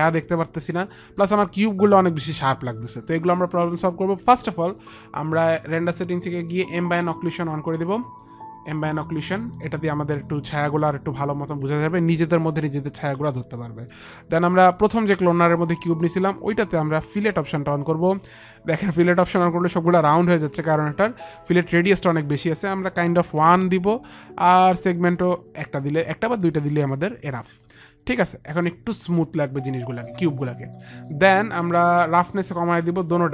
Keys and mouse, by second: 5.2 click, 7.2 click, 8.5 click, 10.2 click, 15.6 click, 22.1 click, 23.2 click, 23.2 KP_1, 23.6 Return, 23.6 click, 23.6 KP_1, 24.9 Return, 24.9 click, 24.9 KP_1, 26.3 KP_2, 26.8 Return, 27.8 Return, 27.8 click, 27.8 KP_2, 29.1 Return, 29.1 KP_2, 32.9 click.